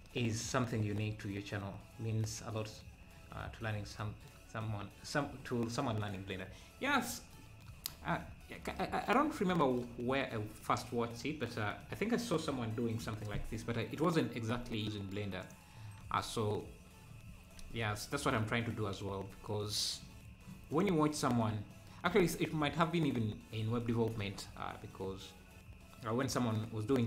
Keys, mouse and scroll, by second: 15.5 click, 16.0 ctrl+s, 20.7 click.